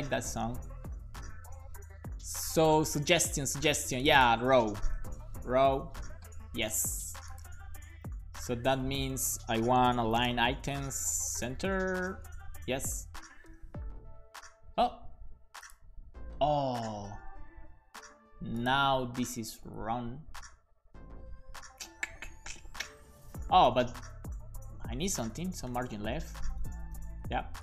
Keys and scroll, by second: 4.4-5.5 typing, 5.6 Down, 8.1 super+Left, 8.8 super+Right, 9.1 shift+super+Left, 9.7-10.8 typing, 12.2 super+s, 12.6 Up, 13.0 super+Right, 19.8 super+Right, 21.4 shift+super+Left, 24.2 alt+Right, 25.2 BackSpace, 25.8 l, 26.6 BackSpace, 27.0 f, 27.3 super+s.